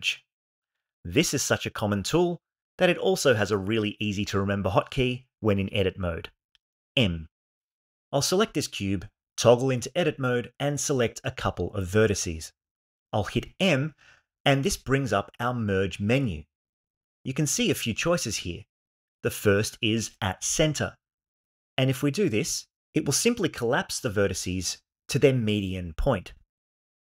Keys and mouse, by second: 8.6 Tab, 10.0 click, 10.8 shift+click, 13.1 m.